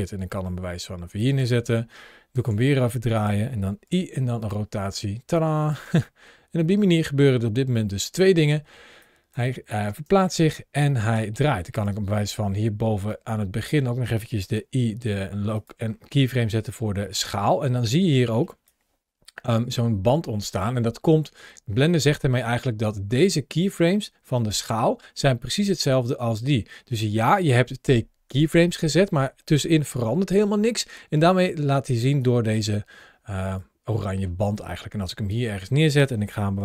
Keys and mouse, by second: 0.2 middle click, 1.0 drag, 2.2 r, 2.3 r, 3.7 i, 5.2-5.5 drag, 5.7 space, 8.2 space, 8.8 click, 11.5 click, 12.9-13.6 drag, 14.4 i, 18.2 ctrl+shift+a, 33.4 click, 36.4 s.